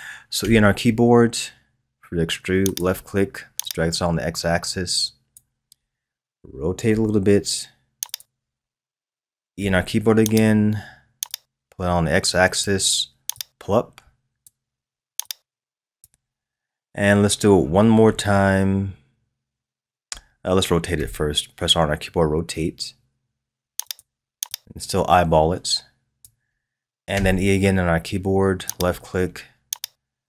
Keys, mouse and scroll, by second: 0.4 e, 3.6-6.6 drag, 6.9 r, 9.6 e, 11.3-18.3 drag, 20.9 r, 24.5 click, 27.1 e, 29.8-30.2 drag.